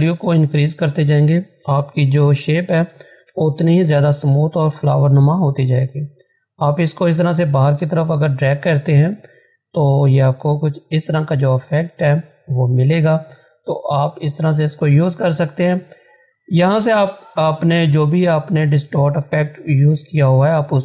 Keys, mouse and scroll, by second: 2.3-3.4 typing, 6.2 Return, 6.3-11.3 drag.